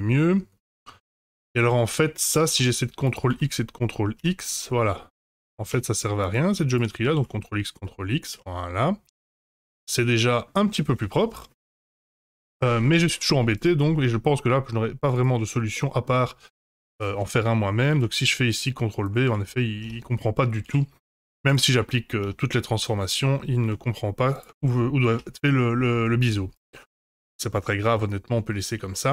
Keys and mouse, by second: 0.0 middle click, 1.3 click, 2.5 ctrl+x, 3.0 click, 3.3 ctrl+x, 3.7 middle click, 4.4 Tab, 4.8 middle click, 5.7 Tab, 6.2 click, 7.1 ctrl+x, 7.8 middle click, 8.5 Tab, 9.5-10.4 middle drag, 10.9 Tab, 11.6 3, 11.7 click, 13.4 2, 13.9 middle click, 15.1 shift+click, 15.7 middle click, 17.9 ctrl+b, 20.0 ctrl+z, 20.1 Tab, 20.6 ctrl+a, 22.2 Tab, 22.9 middle click, 23.6 ctrl+b, 24.6 ctrl+z, 25.3 Tab, 27.0-27.3 middle drag, 27.9-28.3 middle drag, 28.9-29.1 shift+middle drag.